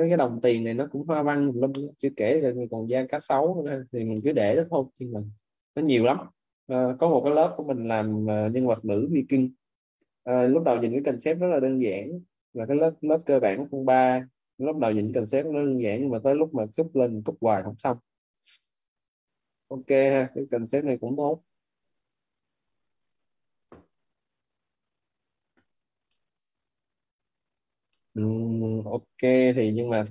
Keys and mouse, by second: 1.6 middle click, 3.9 middle click, 6.1 click, 10.1 click, 11.8 middle click, 12.6 click, 16.6 click, 22.8 click, 25.9 middle click, 26.4 click, 27.8 middle click.